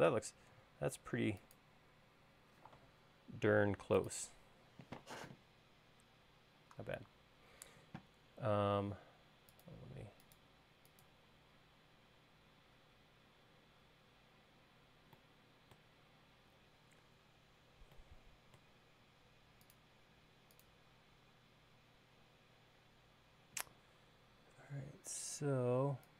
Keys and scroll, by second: 3.8 Caps_Lock.